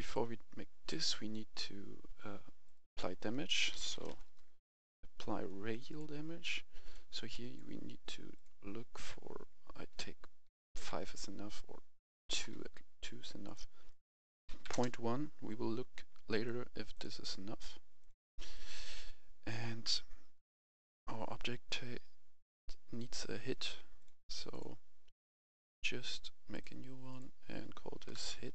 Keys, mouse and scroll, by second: 0.1-1.6 drag, 3.3-4.0 typing, 5.8 click, 10.8 5, 12.4 BackSpace, 12.5 2, 13.4 click, 14.6 1, 14.7 Return, 16.3 right click, 16.9 click, 18.5-19.6 right drag, 20.4 click, 28.0 typing.